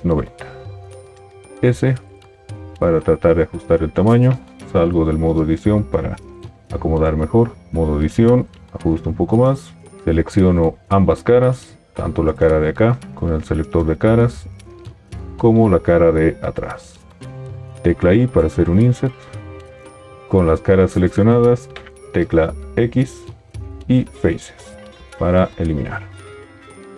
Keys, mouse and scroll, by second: 1.4 s, 4.9 Tab, 6.4 g, 7.6 Tab, 17.7 i, 22.7 x.